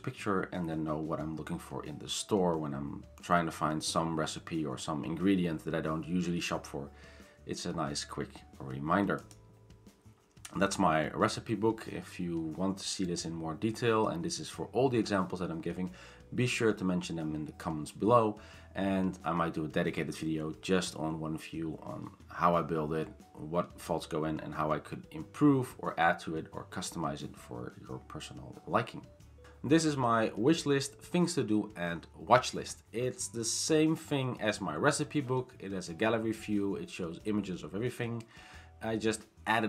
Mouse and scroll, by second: 9.3 click.